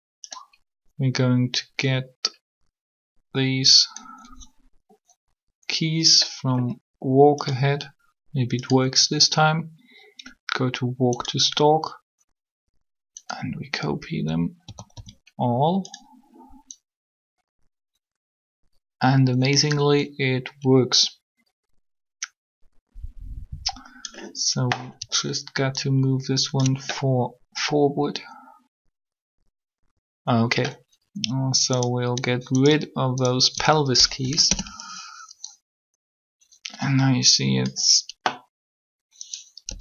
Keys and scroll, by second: 14.6 a, 14.7 a, 34.1 shift+Delete, 34.3 Return, 39.7 b.